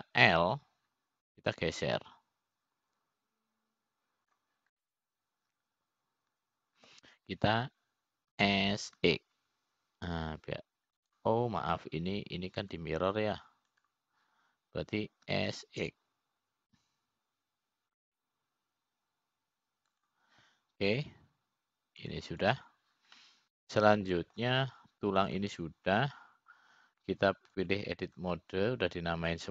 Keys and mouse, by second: 1.0 click, 3.1 l, 4.0-7.2 drag, 7.3-9.6 middle drag, 11.0 s, 15.3 click, 16.5 click, 17.9 5, 24.6 click, 25.8-27.0 middle drag, 27.9 click.